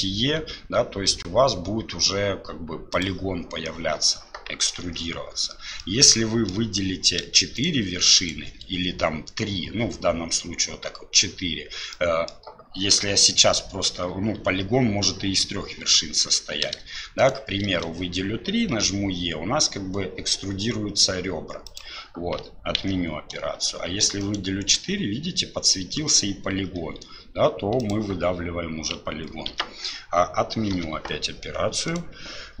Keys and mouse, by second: 4.8 ctrl+z, 5.8 click, 8.2 shift+click, 11.9 middle click, 17.2 shift+right click, 22.8 ctrl+z, 29.5 ctrl+z, 30.7 KP_7, 31.9 click.